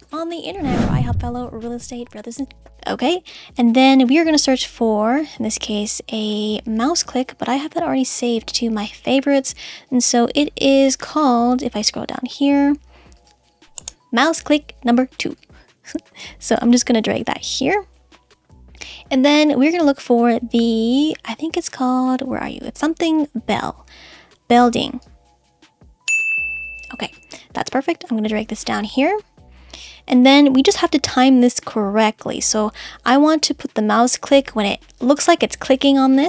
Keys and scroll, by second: 0.0 space, 2.4 space.